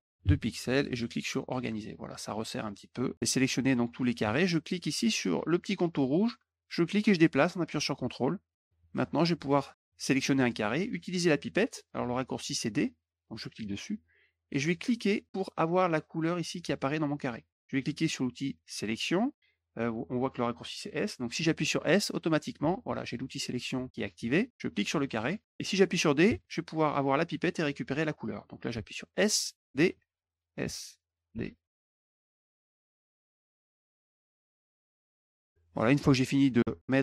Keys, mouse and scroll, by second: 1.1 click, 6.1-8.5 drag, 8.8 click, 9.0 middle click, 9.8 click, 13.3 click, 14.8 click, 22.4 s, 24.6 click, 26.1 d, 27.5 click, 28.7 s, 28.9 click, 29.8 s, 30.1 click, 30.5 d, 30.9 click, 31.3 s, 31.9 click, 32.1 d, 32.5 click, 32.6 click, 32.7 click, 32.9 click, 33.4 click, 33.5-34.9 typing, 33.7 click, 33.8 click, 33.9 click, 34.3 click, 34.4 click, 34.6 click, 34.7 click, 34.9 click, 35.0 click, 35.2 click.